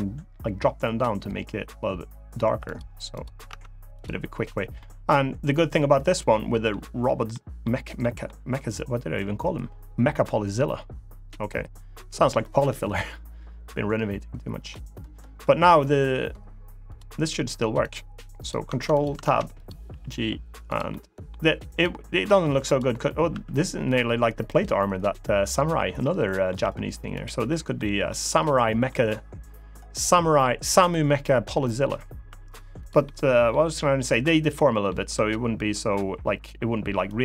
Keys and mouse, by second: 2.4 click, 2.9 click, 3.2 Tab, 3.7 click, 4.5-6.4 middle drag, 7.1-7.4 middle drag, 7.8 middle drag, 14.4-15.1 middle drag, 16.6 click, 17.6 click, 18.7 click, 19.0 ctrl+Tab, 19.6 g, 20.4 click, 20.6-21.0 middle drag, 21.5 click, 23.0 r, 24.2 right click, 25.8-26.2 middle drag, 26.3 r, 26.9 click, 27.2 middle drag, 27.8-28.6 middle drag, 32.0 r, 32.5 click, 32.8-33.2 middle drag, 33.4 r, 33.8 click, 34.3-34.6 middle drag, 34.9 r, 36.8 click.